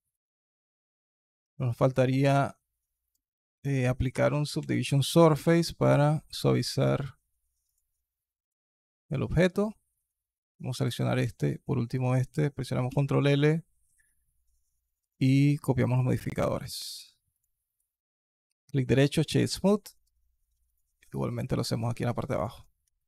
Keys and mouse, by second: 0.2 alt+click, 1.2 alt+drag, 1.6 alt+click, 3.4-5.8 drag, 12.7 ctrl+l, 16.5 alt+click, 17.1 click, 17.5-19.0 drag, 19.4 click, 19.8-20.5 drag, 21.0-21.4 alt+drag, 22.0 alt+click, 22.4 click, 22.8 alt+KP_1.